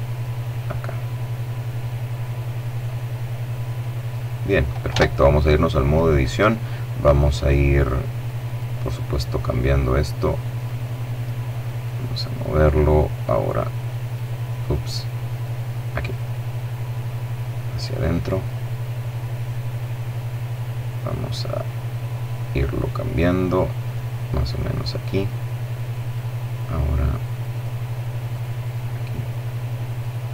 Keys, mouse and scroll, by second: 3.8 Tab, 5.1 right click, 6.4-8.0 right drag, 9.5 click, 10.5 right click, 11.9-13.5 right drag, 14.2 right click, 15.1-17.2 drag, 17.3-18.9 middle drag, 20.5-22.5 right drag, 22.7 click, 24.1 right click, 25.0 click, 26.4 click, 27.2 right click, 28.8-30.3 drag.